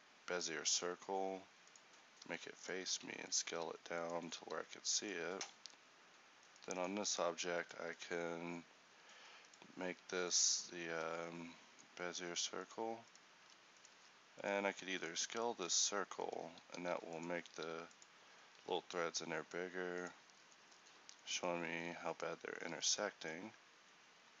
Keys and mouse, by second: 2.3 s, 2.9 s, 4.4 s, 7.6 right click, 7.7-13.5 middle drag, 13.5 Tab, 14.1 Tab, 15.7-16.8 middle drag, 16.8 s, 17.6 s, 22.7 Tab, 23.3 z, 24.3 z.